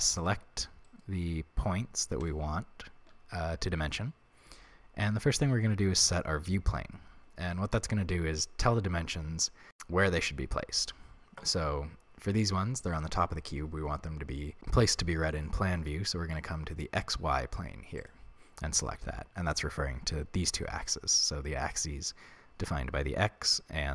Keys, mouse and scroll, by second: 0.1 right click, 0.8 shift+right click, 2.2 shift+right click, 6.0 click.